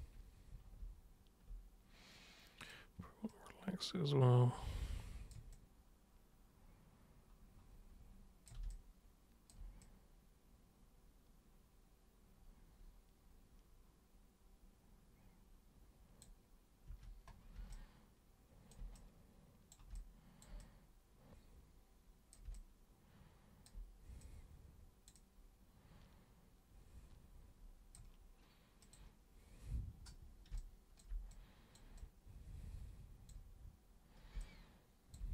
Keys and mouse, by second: 2.6 super+click, 3.3-5.2 super+drag, 5.5-8.4 super+drag, 8.7 alt+super+click, 9.8-16.2 super+drag, 16.8 super+3, 17.7-18.7 alt+super+drag, 18.9 super+click, 19.9 alt+super+click, 20.6-22.3 super+drag, 22.5-23.6 alt+super+drag, 24.2 super+click, 25.1-27.9 super+drag, 28.8 super+click, 30.5 super+b, 30.6 super+click, 31.3 super+click, 31.9-33.3 super+drag, 34.3 super+b, 34.3 click.